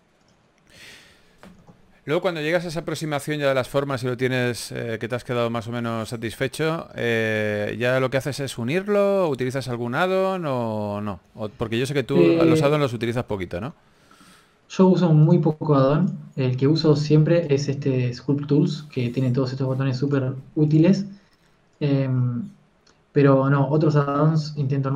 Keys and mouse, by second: 2.4 s, 4.8 s, 5.4 Tab, 7.0 a, 7.8 ctrl+s, 12.5 KP_3, 14.1 Tab, 14.7 Tab.